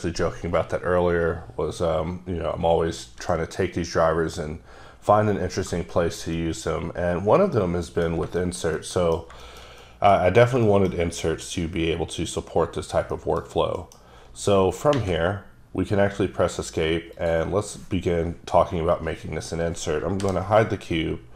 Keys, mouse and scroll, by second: 6.4 middle click, 8.2 scroll down 2, 8.4 shift+middle click, 10.3 scroll up 1, 10.7 shift+middle click, 11.0-12.8 scroll up 1, 12.8-13.1 scroll down 1, 13.1 middle click, 13.5 scroll down 1, 13.8 middle click, 14.3 scroll up 2, 17.2 click, 20.3 h.